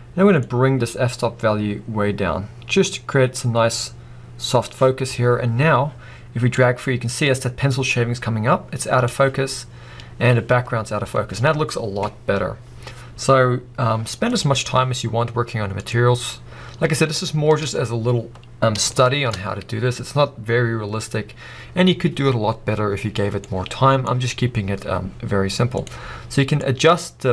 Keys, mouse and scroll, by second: 0.5-5.6 drag, 5.1 scroll up 1, 6.7-14.5 drag, 15.9 click, 17.1-21.2 shift+middle drag, 21.4 scroll up 2, 26.6 click.